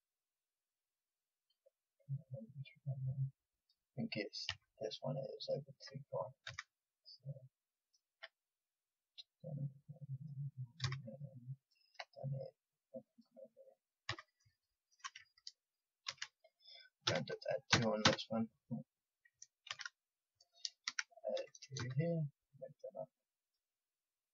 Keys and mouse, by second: 4.4 a, 6.4 a, 9.8 click, 10.8 a, 11.5-14.7 drag, 14.0 a, 16.0 ctrl+r, 19.6 ctrl+z, 20.8 ctrl+r.